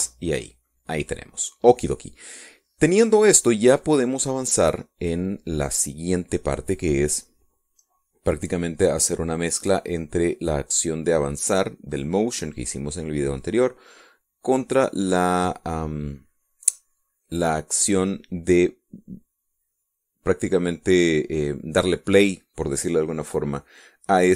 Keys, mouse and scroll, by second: 0.1 ctrl+shift+s, 0.7 ctrl+shift+KP_Add, 1.2 KP_Enter, 4.0-4.3 scroll down 1, 6.0-8.6 middle drag.